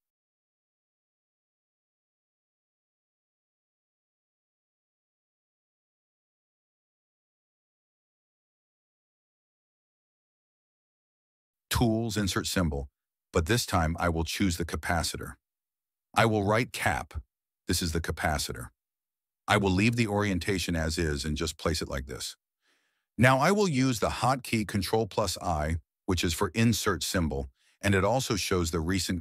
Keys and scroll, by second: 7.9 alt+r, 8.5 alt+r, 16.5-17.5 typing, 25.3 ctrl+i.